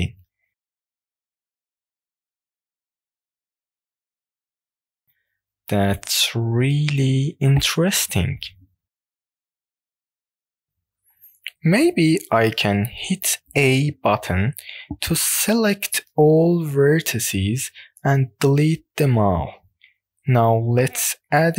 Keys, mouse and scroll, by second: 0.3 click, 0.7 middle click, 1.7 click, 2.4-4.2 middle drag, 4.2-4.5 scroll up 2, 4.6 shift+middle click, 5.0 middle click, 5.7 scroll up 1, 6.0 shift+middle click, 6.4-9.7 middle drag, 10.1-12.1 scroll down 3, 12.1 click, 13.9 a, 15.0 scroll down 1, 15.0 middle click, 16.1 x, 19.7 shift+a.